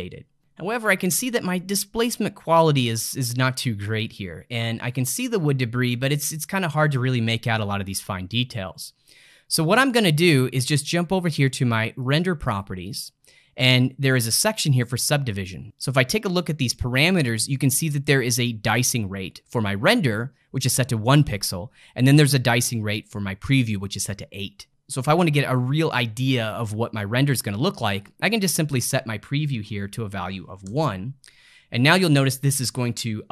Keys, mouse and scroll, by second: 0.0 ctrl+middle click, 12.0 click, 15.8 click, 28.3-31.5 drag.